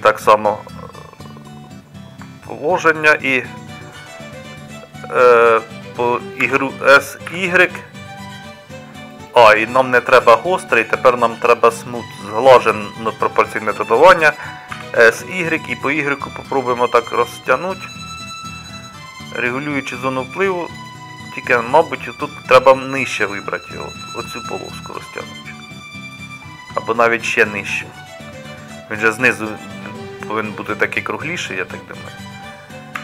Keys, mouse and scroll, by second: 6.5 s, 14.9 s, 18.6-23.5 middle drag.